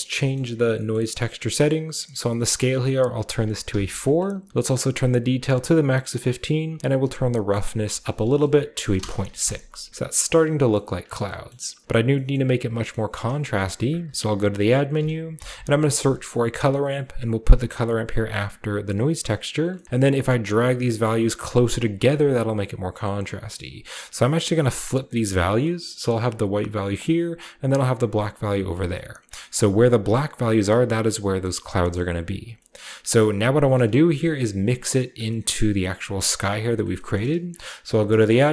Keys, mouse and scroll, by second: 0.7 typing, 2.5 click, 3.6-4.2 typing, 4.0 click, 5.5 click, 7.5 click, 8.4 click, 8.7 typing, 8.9 Return, 9.6-11.2 scroll down 2, 10.7 middle click, 11.8 click, 12.0 scroll down 1, 13.2-13.8 scroll down 1, 13.2-13.8 typing, 14.6 drag, 15.0-16.2 typing, 16.5 click, 18.2-18.9 drag, 19.2 click, 19.8-20.9 middle drag, 19.8-20.3 scroll up 1, 20.3-20.9 drag, 21.3-22.6 drag, 23.1-23.9 drag, 24.1-24.7 drag, 25.0 click, 27.2-28.6 drag, 28.6-30.3 scroll down 1, 31.4-32.2 typing, 31.4 middle click, 31.6-32.2 scroll down 1, 32.2 click, 32.7-33.5 scroll up 1, 33.5 click, 34.0 middle click, 34.0 typing, 34.3 click, 34.4 middle click, 35.2-36.5 middle drag, 36.5 click, 36.8 middle click, 36.9 drag, 37.8 typing.